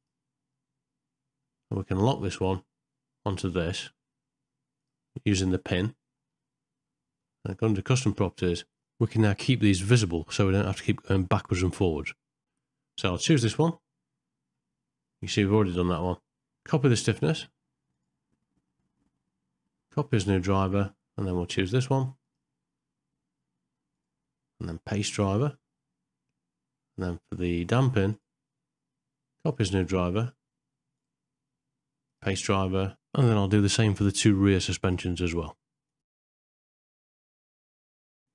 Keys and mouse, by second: 4.8 click, 7.9 click, 17.9-20.2 right drag, 24.0-25.3 right drag, 28.1-29.7 right drag, 30.9-32.2 right drag, 33.3 click, 33.8 right click, 34.1 right click, 35.0 right click, 35.5 right click, 35.8 middle click, 36.8 right click, 37.2 right click, 37.8 right click.